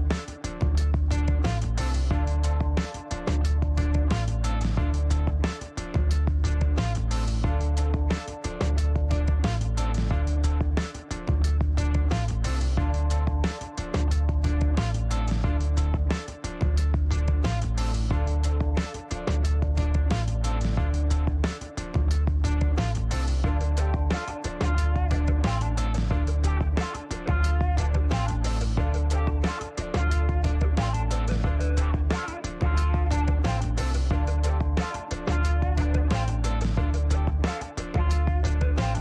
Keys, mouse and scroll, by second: 2.3 shift+right click, 6.0 click, 8.1 click, 10.9 click, 13.7 click, 14.0 right click, 14.8 click, 16.2 click, 16.8 click, 18.6 8, 20.1 click, 20.9 scroll up 2, 22.3 click, 25.7 click, 30.5 click, 33.0 KP_7, 33.4 KP_5, 34.5-35.0 scroll down 4, 35.8 middle click, 36.4 scroll down 2, 36.8 scroll up 1, 36.8 middle click, 38.3 click.